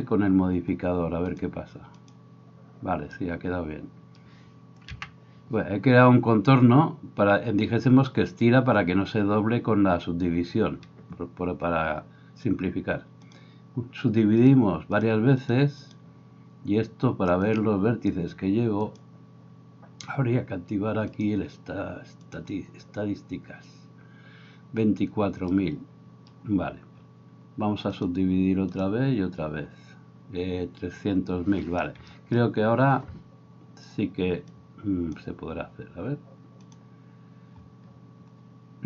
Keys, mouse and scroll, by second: 5.0 n, 36.8-38.8 middle drag.